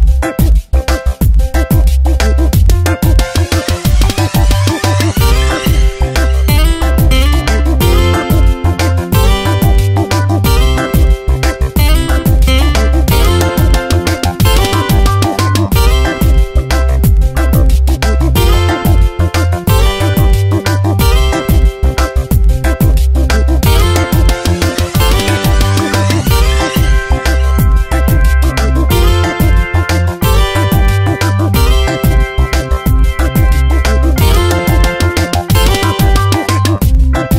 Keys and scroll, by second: 22.1 ctrl+Return, 22.7 ctrl+z, 30.2 ctrl+Return, 31.2 ctrl+x, 32.2 v, 33.9 ctrl+v, 37.2 space.